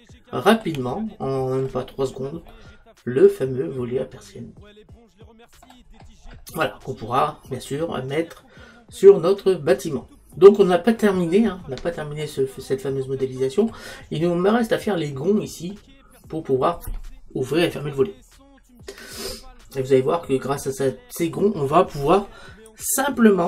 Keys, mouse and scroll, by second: 11.0-12.3 middle drag, 20.7-23.4 middle drag.